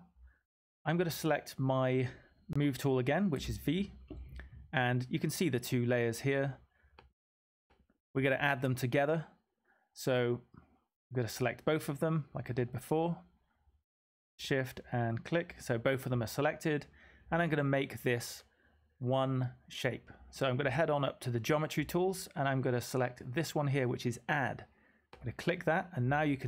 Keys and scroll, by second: 3.3 typing.